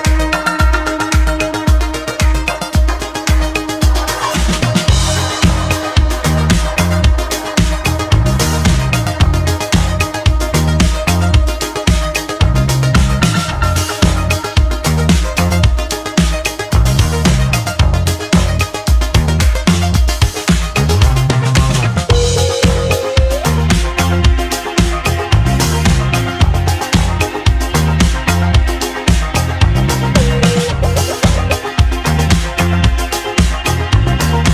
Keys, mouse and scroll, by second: 0.5 shift+d, 13.0-15.1 middle drag, 15.1 click, 18.2 `, 19.2-20.3 scroll up 4, 20.3 shift+s, 22.0 shift+a, 22.7 click, 23.1 shift+a, 25.4 shift+a, 27.0 r, 28.9-29.2 scroll down 2, 29.6 s, 33.5-34.3 scroll down 5, 34.3-34.5 shift+middle drag.